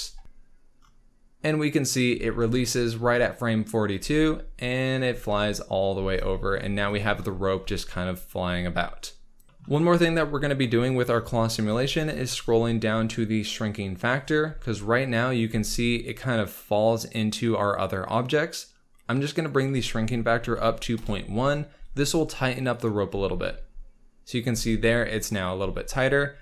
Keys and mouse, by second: 0.0 ctrl+s, 0.0 space, 2.1 space, 3.9 space, 5.9 space, 7.5 space, 9.6 ctrl+s, 9.7 space, 14.4 space, 19.5-20.9 drag, 22.7 click, 23.1 space, 24.5 space, 25.2 click, 25.5 space.